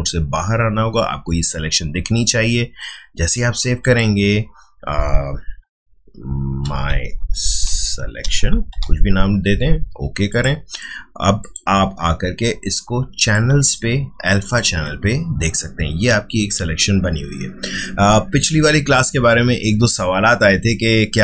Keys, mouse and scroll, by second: 3.8 click, 6.4-9.3 typing, 10.3 click.